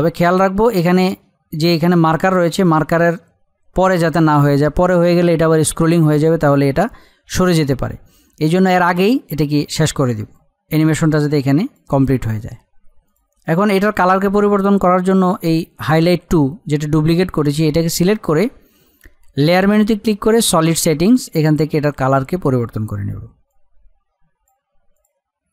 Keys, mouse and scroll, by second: 10.3-13.1 drag, 19.5-24.9 drag.